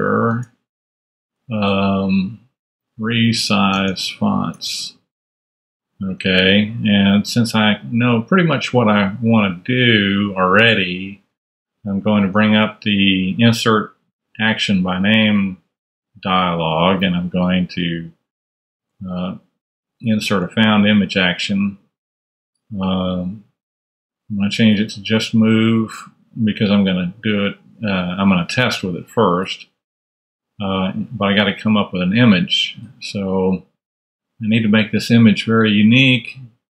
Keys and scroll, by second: 0.6 alt+super+space, 0.7 alt+-, 1.8-5.3 typing, 6.0 Tab, 11.2 ctrl+super+a, 18.1-19.3 typing, 19.9 Return, 30.5 super+Tab.